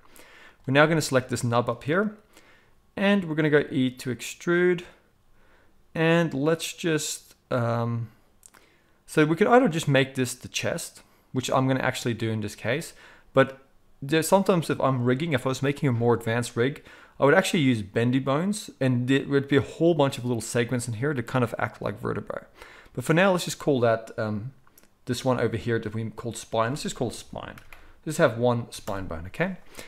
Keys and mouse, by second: 3.4 e, 15.1 click, 15.2-23.3 middle drag, 23.3-25.1 drag, 25.1-26.3 middle drag, 26.3-29.8 drag.